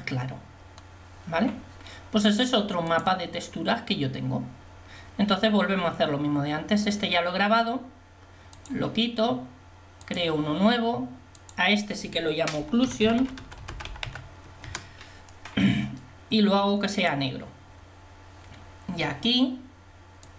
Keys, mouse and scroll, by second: 14.8 c.